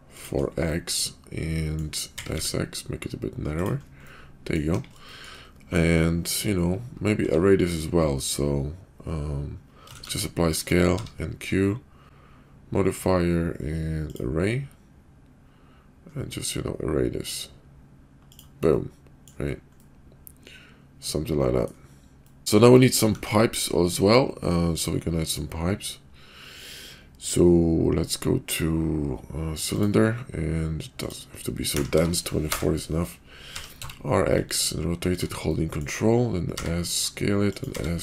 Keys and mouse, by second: 0.7-1.8 middle drag, 2.0 s, 4.0-4.6 middle drag, 4.7 KP_5, 5.0 shift+middle drag, 7.1 q, 9.9 ctrl+a, 10.9 q, 18.7-19.3 drag, 18.7-19.3 right drag, 19.7-20.7 drag, 19.7-20.7 right drag, 20.7-21.7 middle drag, 22.1 middle drag, 23.0 shift+a, 31.1 click, 33.6 r, 35.5 middle click, 36.5 s, 37.7 s.